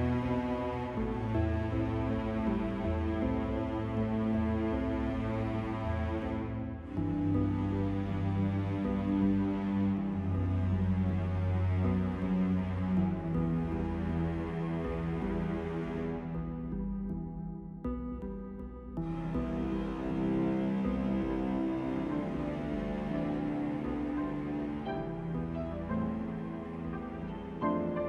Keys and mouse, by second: 0.3 click, 0.9 click, 1.4-3.8 middle drag, 3.8-7.3 right drag, 4.0-5.3 drag, 7.3 i, 9.7 ctrl+z, 12.7 KP_7, 13.8 KP_5, 16.4 click, 17.1-18.4 right drag, 17.3-18.4 drag, 18.6 shift+s, 21.3 shift+a, 23.1 s.